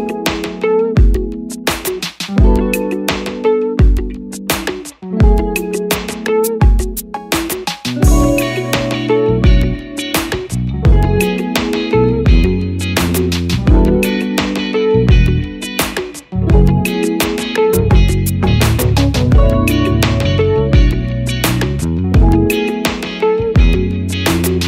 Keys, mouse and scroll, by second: 17.0 double click, 21.3 Return.